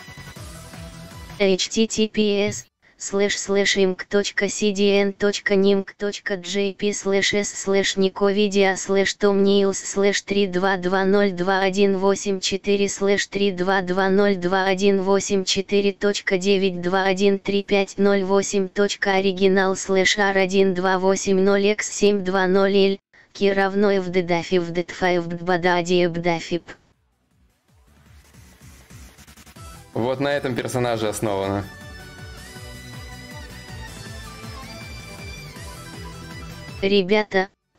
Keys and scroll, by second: 0.2 Return, 11.1 alt+Tab.